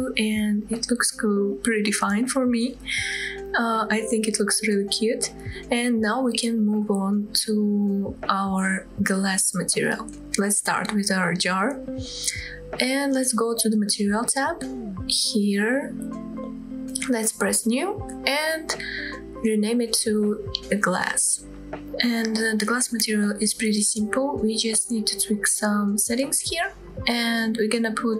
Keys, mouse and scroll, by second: 2.5-3.2 scroll up 2, 4.9 scroll down 1, 7.4-7.8 scroll down 1, 7.8-8.3 middle drag, 8.4-8.8 scroll up 2, 9.0 shift+middle drag, 9.4-9.7 middle drag, 10.1 click, 16.7-18.1 drag, 18.8 click, 19.0-23.2 drag, 21.6 s, 25.1-26.6 scroll down 2, 26.6-28.1 scroll down 2.